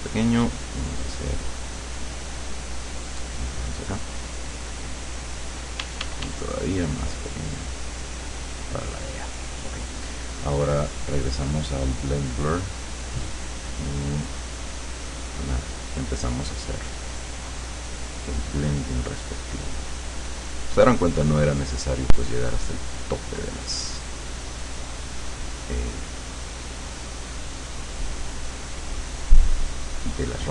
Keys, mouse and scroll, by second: 0.4 click, 1.5-3.7 drag, 4.2 click, 4.8 click, 5.9 d, 6.8 click, 7.7 click, 8.3 click, 11.2 click, 12.6 click, 14.7-17.2 drag.